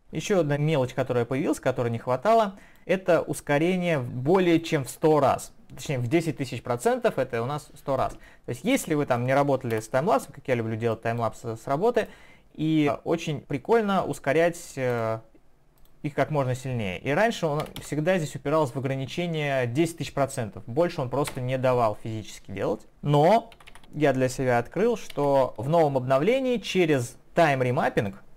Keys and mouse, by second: 1.0 click, 4.0 click, 4.6 click, 5.4 click, 8.8 click, 9.7 BackSpace, 10.9 click, 12.0 right click, 14.9 click, 15.8 click, 21.3 Return, 22.9 Home, 23.6 typing, 25.1 ctrl+z.